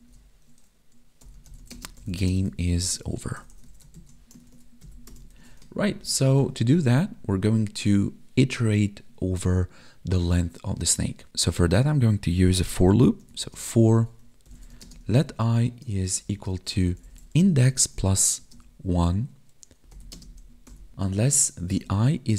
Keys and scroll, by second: 1.7 space, 2.2 space, 4.4 ctrl+s, 4.8 Right, 5.3 ctrl+s, 5.8 ctrl+Down, 13.4 space, 14.8 space, 15.9 space, 16.3 space, 17.6 space, 18.4 space, 20.1 space.